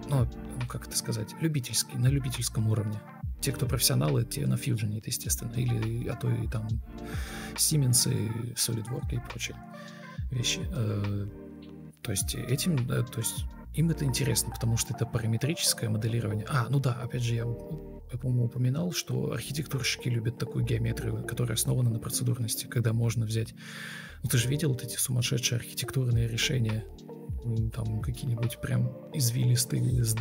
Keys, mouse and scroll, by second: 0.9 Delete, 26.3 ctrl+alt+shift+v, 27.1 ctrl+z, 27.3 ctrl+v.